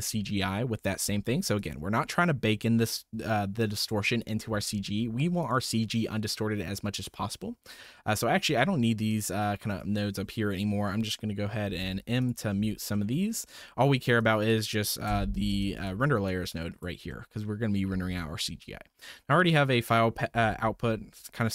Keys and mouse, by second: 1.5-3.0 drag, 3.6-4.3 drag, 4.5 typing, 5.4 click, 5.7-7.0 drag, 7.5-7.9 middle drag, 9.2-9.8 drag, 11.7 m, 12.2 click, 12.5 m, 13.0 drag, 13.3 middle drag, 14.1 click, 15.1 m, 15.6 click, 16.2 click, 17.1 click, 18.6-19.9 drag.